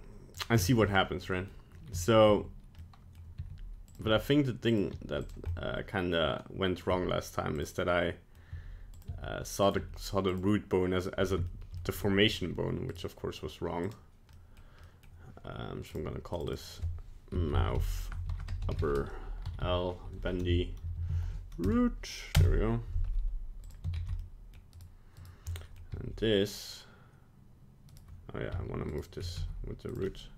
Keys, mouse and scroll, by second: 0.4 right click, 0.6 shift+middle click, 0.9 middle click, 2.0 shift+middle click, 2.8 middle click, 3.4 r, 4.0 g, 4.9 r, 5.5 middle click, 6.3 middle click, 6.4 middle click, 6.5 middle click, 6.7 middle click, 6.9 g, 7.8 middle click, 8.5 g, 9.1 r, 9.8 g, 10.6 middle click, 11.5 shift+middle click, 12.9 right click, 13.8 click, 14.3 middle click, 14.9 middle click, 15.9 click, 18.6 p, 19.6 Right, 21.0 shift+Left, 21.1 shift+Left, 23.7 click, 25.2 right click, 25.5 middle click, 25.9 g, 28.9 shift+right click, 29.4 g, 30.1 middle click.